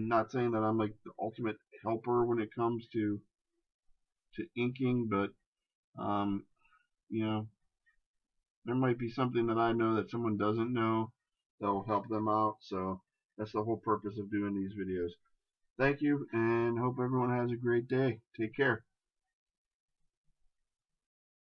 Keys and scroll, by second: 4.2 ctrl+z, 7.3 ctrl+z, 13.4 ctrl+KP_Subtract.